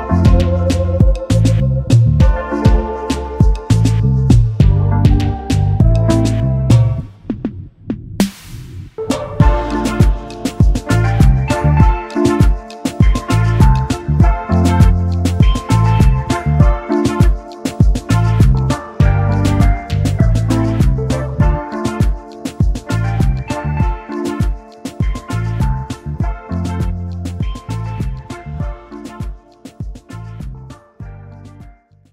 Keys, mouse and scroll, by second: 2.2 shift+click, 2.4 alt+scroll down 1, 2.5 space, 4.3 alt+scroll up 1, 9.7-10.2 typing, 10.9 double click, 14.6 ctrl+x, 18.3 double click, 20.2 ctrl+f, 21.3 double click, 21.6 alt+scroll down 1, 23.1 ctrl+z, 23.5 alt+scroll down 1, 23.6 space, 24.9 right click, 26.7 double click, 27.7 alt+shift+click, 29.5 alt+scroll up 1, 29.8 space.